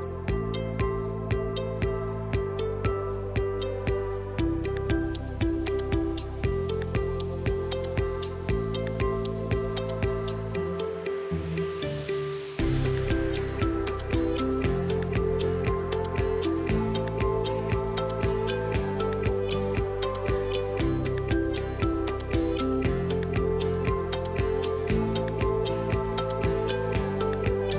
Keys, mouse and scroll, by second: 4.3 click, 5.0 click, 5.0 l, 7.2 l, 8.4 space, 10.5 Left, 11.8 BackSpace, 14.2 click, 14.2 g, 16.3 middle click, 17.3 click, 18.0 ctrl+click, 18.4 ctrl+click, 18.9 click, 24.7 click, 25.0 typing, 27.6 click, 27.6 typing.